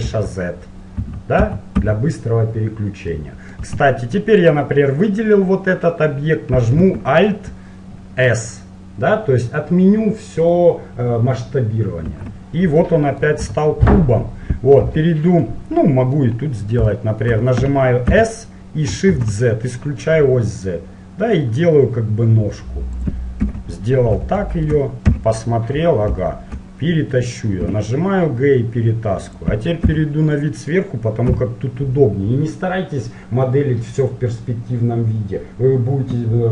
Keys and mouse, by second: 0.3 z, 1.2 z, 1.6 z, 2.0 z, 3.3-4.6 middle drag, 3.8 z, 4.6-7.0 right drag, 12.2 alt+s, 13.0 middle click, 13.7 z, 14.9 KP_1, 17.4 middle click, 18.2 s, 18.4 middle click, 23.6 KP_7, 25.3 KP_1, 26.4 middle click, 27.8 g, 30.0 KP_7, 30.6-32.4 middle drag, 31.4 z.